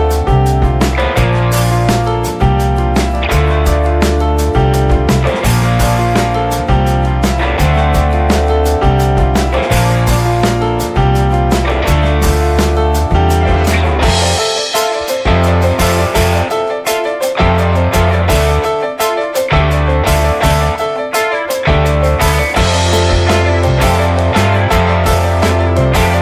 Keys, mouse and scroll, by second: 0.8 alt+z, 1.1-3.2 middle drag, 3.2 drag, 3.5 drag, 3.8 alt+middle click, 4.0 alt+middle click, 4.9 shift+a, 5.7 s, 7.1 s, 7.8 middle click, 8.0-9.1 scroll up 1, 9.1 click, 9.3 scroll down 2, 9.5-9.8 middle drag, 9.8 scroll up 1, 9.9-12.4 middle drag, 12.4 click, 17.1 scroll down 2, 17.3 middle click, 18.1-18.4 drag, 18.4-19.1 shift+middle drag, 19.1 click, 19.6 shift+click, 21.2 ctrl+shift+b, 21.7-22.1 middle drag, 22.1 click, 22.3-23.5 middle drag, 23.5 click, 23.7-24.4 shift+middle drag, 24.4 click.